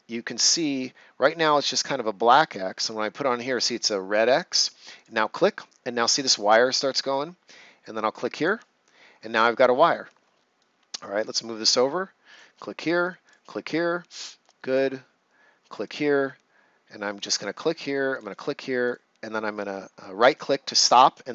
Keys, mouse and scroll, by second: 4.9 click, 8.3 click, 10.5 right click, 12.2 click, 14.1 right click, 15.7 click, 15.8 click, 18.8 right click.